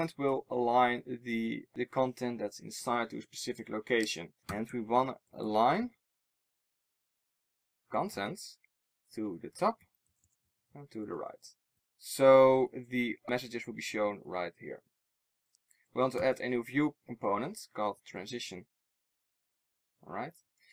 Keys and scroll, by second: 18.0 Return.